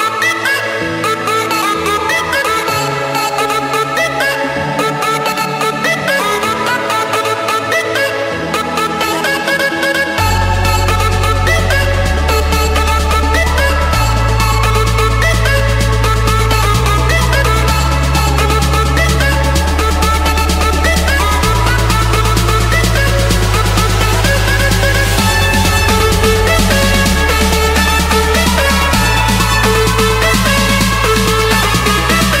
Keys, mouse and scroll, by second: 0.8 click, 2.1 Return, 4.0-5.0 drag, 5.2-6.3 drag, 6.4-7.5 drag, 8.1-9.1 drag, 10.2 Return, 10.9 Escape, 11.8-12.9 drag, 14.8-16.0 drag, 16.4-17.6 drag, 18.0-19.2 drag, 20.2 click, 20.5-21.8 scroll down 11, 21.8-22.6 scroll up 6, 23.4 click, 24.6 click, 25.6 click, 26.8 click, 28.5 click, 30.3 click, 30.7-31.4 scroll down 2, 31.4 scroll down 1, 32.1-32.4 scroll up 3.